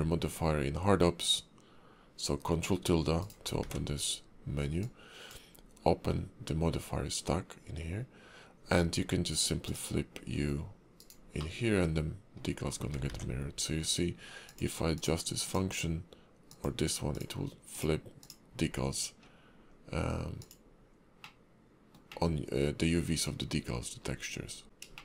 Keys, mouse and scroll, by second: 3.6 ctrl+`, 11.5 middle click, 13.1 ctrl+`, 22.3 middle click, 23.6-24.1 scroll up 3, 24.1 scroll down 1, 24.8 ctrl+z, 24.8 click, 24.8 scroll up 2.